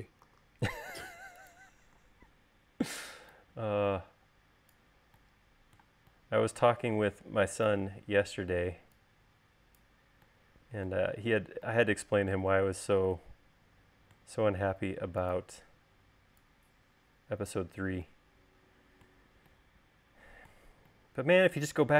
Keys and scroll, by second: 0.8 v.